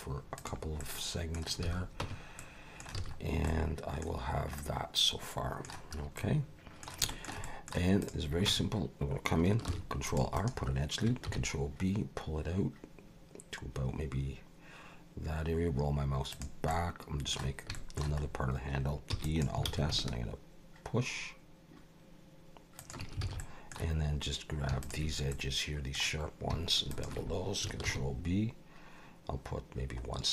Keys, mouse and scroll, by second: 0.8 middle click, 1.6 alt+a, 2.0 Tab, 2.4 middle click, 3.0 alt+a, 3.2 scroll down 3, 3.5 middle click, 4.1-4.6 scroll down 2, 4.6 middle click, 5.9 scroll up 2, 6.2 middle click, 7.1 shift+middle click, 7.4 middle click, 8.0 click, 8.5 Tab, 9.7 ctrl+r, 11.3 ctrl+b, 16.7 middle click, 17.7 shift+middle click, 18.2-19.1 scroll up 3, 19.1 e, 19.6 alt+s, 23.2 alt+a, 23.4 middle click, 24.8 alt+shift+click, 25.3 middle click, 26.9 alt+shift+click, 27.8 ctrl+b.